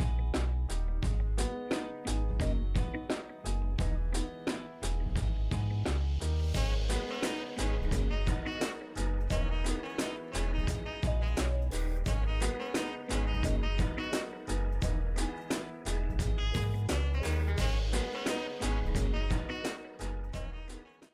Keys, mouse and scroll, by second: 0.2 shift+Up, 2.5-8.3 drag, 6.7 typing, 13.8 scroll down 1, 14.3-14.7 scroll up 1.